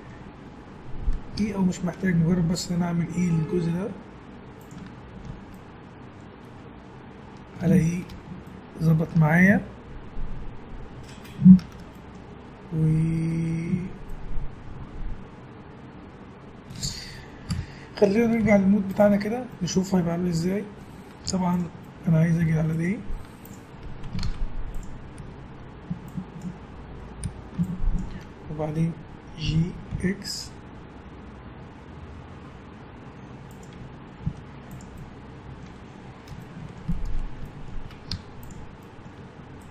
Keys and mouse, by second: 1.4 e, 4.8 Tab, 17.5 KP_Divide, 18.4 z, 19.5-21.6 middle drag, 21.2 Tab, 22.4 Tab, 22.7 right click, 23.2 Tab, 24.2 ctrl+Tab, 25.2 a, 26.1 click, 27.2 a, 27.5 click, 29.4 g, 33.7 Tab, 34.2 z, 35.6 a, 38.1 Tab, 39.2 Tab.